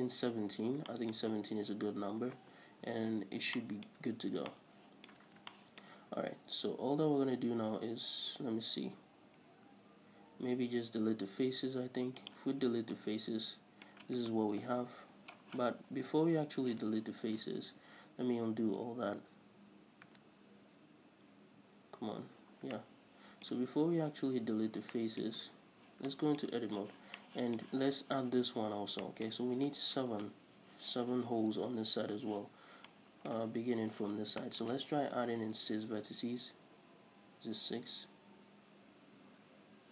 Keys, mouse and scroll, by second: 0.1-0.5 scroll up 1, 2.2-2.6 scroll down 1, 2.6 Tab, 4.3 scroll up 1, 5.5 scroll down 1, 6.3 scroll up 1, 11.6 x, 12.7 scroll down 2, 12.8 Tab, 14.8 KP_7, 15.7 z, 16.3 Tab, 16.5-16.9 scroll up 2, 16.9 z, 19.8 ctrl+z, 24.4 scroll down 2, 24.6-25.1 scroll up 2, 25.1 shift+middle click, 25.6 Tab, 26.3 shift+middle click, 27.2-39.9 middle drag, 35.2 ctrl+r.